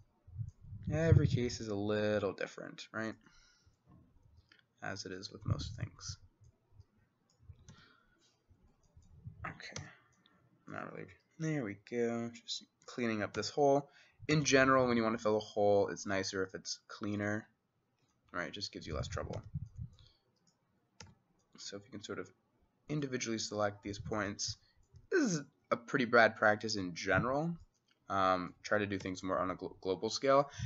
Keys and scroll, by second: 7.7 x, 9.8 c, 13.4 c, 14.4 x, 19.4 x, 21.1 x, 29.1 x.